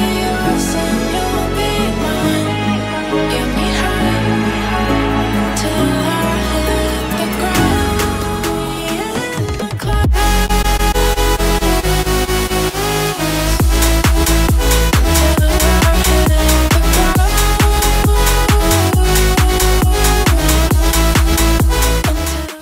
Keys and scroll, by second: 3.3 ctrl+shift+].